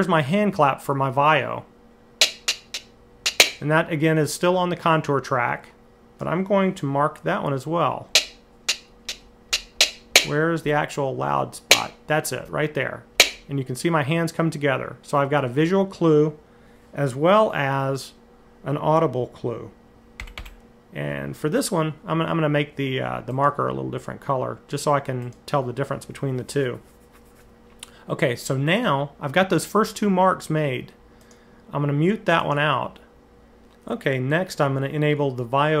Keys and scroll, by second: 7.9 Right, 8.4 Right, 8.8 Right, 9.3 Left, 9.6 Left, 9.9 Left, 10.4 Left, 11.5 Right, 12.2 Left, 12.9 Right, 20.0 m, 20.2 m.